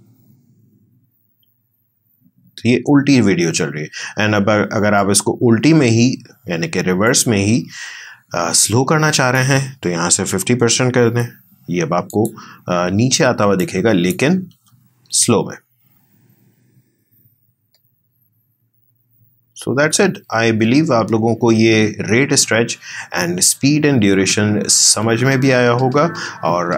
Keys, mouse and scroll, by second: 3.8 space, 5.0 right click, 7.1-10.5 drag, 10.5-11.1 typing, 12.1 click, 14.5 space.